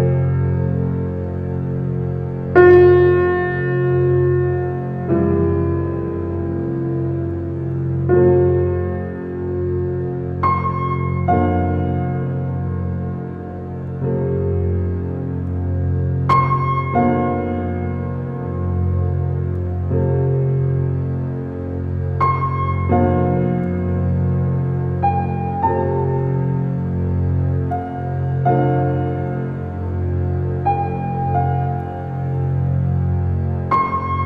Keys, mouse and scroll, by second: 0.6 click, 1.2 g, 3.1 click, 3.5 f, 3.7 g, 5.2 click, 5.6 g, 7.7-8.5 middle drag, 8.5-9.1 scroll down 3, 9.1-10.9 middle drag, 11.9 drag, 13.4-13.8 middle drag, 13.8 ctrl+click, 14.3-17.0 middle drag, 17.0 g, 22.2 r, 24.3 r, 27.7-31.0 middle drag, 32.1-34.1 middle drag, 34.1 g.